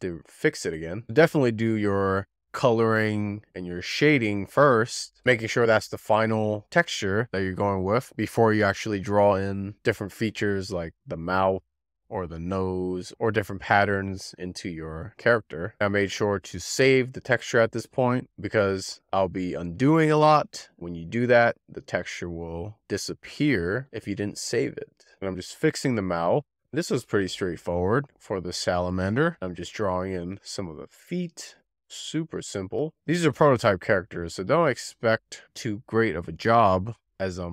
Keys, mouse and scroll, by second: 0.1 f, 2.3-16.1 drag, 16.1 z, 17.2-20.5 drag, 21.4-22.1 scroll down 2, 22.1 click, 24.3 click, 25.1 z, 25.3 scroll down 1, 25.3-26.0 scroll up 3, 25.6 click, 25.7 z, 26.0 click, 26.5-28.3 scroll down 6, 28.4-29.0 scroll down 5, 29.2 click, 29.4-29.8 scroll down 3, 30.0 f, 30.2 click, 30.7 z, 30.9 click, 31.8 z, 32.0 click, 32.1 z, 32.4 click, 32.5-33.1 scroll down 5, 32.8 alt+z, 33.1 middle click, 34.9 alt+z, 35.0 alt+z, 35.2 middle click, 36.3 alt+z, 36.5 shift+middle click, 36.6 scroll up 5, 36.9 click, 37.3 z, 37.4 click.